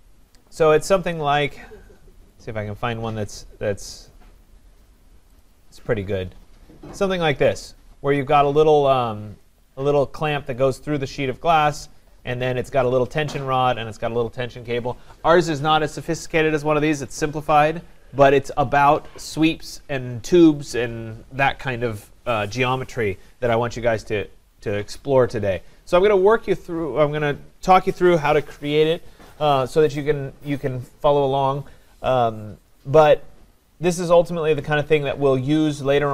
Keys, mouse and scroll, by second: 0.0-0.7 typing, 1.9-2.8 typing, 3.4 scroll down 3, 4.1 scroll down 4, 5.4 click, 26.1 click.